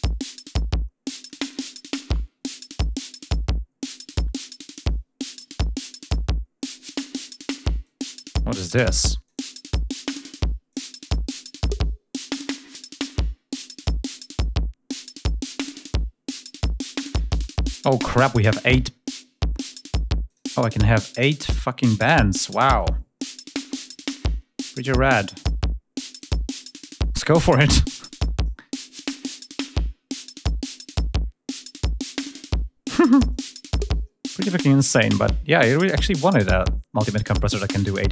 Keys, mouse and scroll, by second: 8.9 click, 9.9-10.7 drag, 11.0 click, 11.4 right click, 12.0-13.6 drag, 14.1-17.8 drag, 20.1 click, 21.6 click, 22.6 click, 23.3 click, 23.9 click, 24.6 click, 25.9 click, 26.5 click, 27.8 click, 29.1 click, 30.4-32.3 drag, 33.1 click, 34.6 click, 35.8 click, 37.2 click.